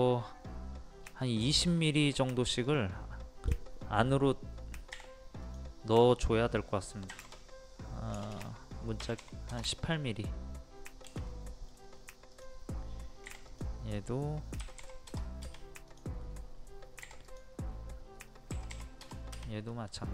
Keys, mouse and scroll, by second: 0.7-1.0 scroll down 1, 1.5 shift+middle click, 2.0-2.3 scroll up 1, 2.7 click, 4.9 p, 5.4 click, 7.1 KP_2, 8.2 BackSpace, 9.0 KP_1, 11.3 middle click, 11.9-12.3 scroll up 1, 12.3 click, 14.6 KP_1, 15.9 click, 17.0 p, 17.3 click, 18.5 KP_1, 19.7 middle click.